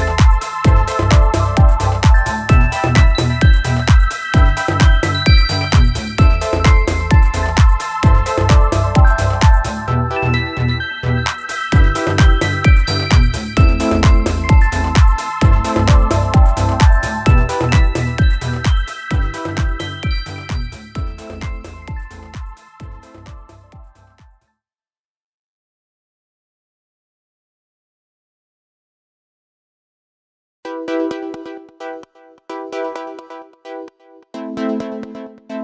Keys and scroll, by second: 11.8 i, 23.5 ctrl+=, 23.6 ctrl+=, 29.3 x, 33.0 ctrl+z.